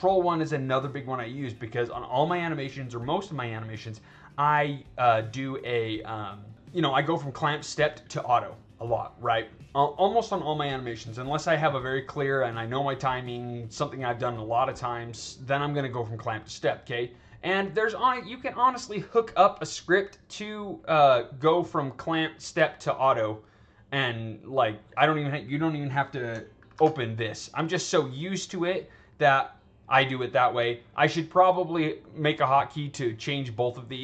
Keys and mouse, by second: 0.6-1.4 drag, 2.5 click, 3.5 click, 17.1 drag, 26.7 ctrl+1, 27.6 click, 28.0 click, 28.4 click.